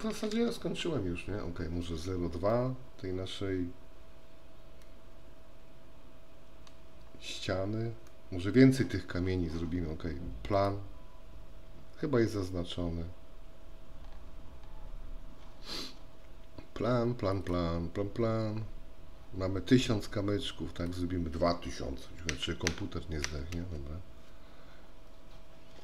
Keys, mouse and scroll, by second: 2.7-6.9 middle drag, 8.2 middle click, 12.6 scroll up 1, 14.0 scroll up 1, 17.3 click, 20.9-25.1 drag.